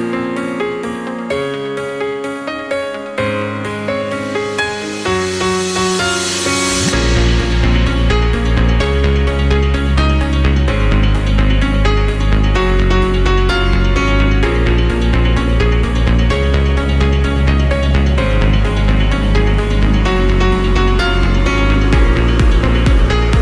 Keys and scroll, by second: 8.7 ctrl+End, 13.9 ctrl+End.